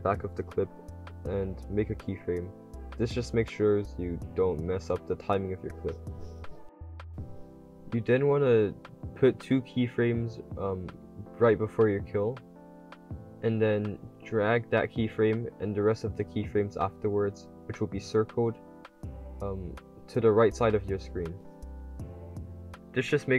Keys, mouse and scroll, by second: 2.3-4.0 typing, 3.1 right click, 6.5-8.3 typing, 6.9 click, 7.6 click, 8.0-11.0 drag, 11.3-18.9 drag, 19.1 click, 19.4 a, 19.7 click, 21.6-23.3 typing, 22.3 right click, 22.7 click.